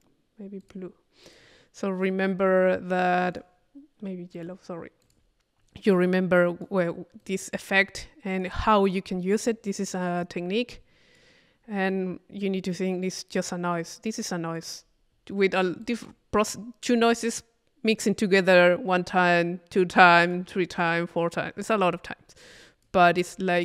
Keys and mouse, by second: 0.6-2.1 drag, 2.5-3.9 right drag, 4.3 click, 5.0 click, 6.0-7.0 drag, 7.2 click, 7.2-9.0 right drag, 9.5 click, 10.7 click, 11.9-13.6 right drag, 13.8-14.9 drag, 15.5 middle click, 15.8 click, 16.5 click, 16.5 middle click, 20.0 click, 22.6 click, 23.2-23.6 middle drag.